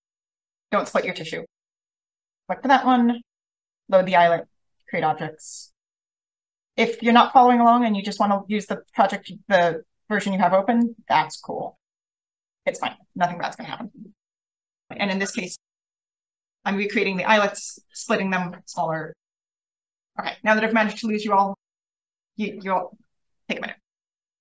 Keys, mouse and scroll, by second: 2.3 click, 3.2 click, 4.7 click, 7.6 click, 8.8 click, 9.6 5, 10.0 0, 10.7 click, 11.5 5, 11.9 0, 12.5 click, 13.0 click, 23.8-24.3 drag.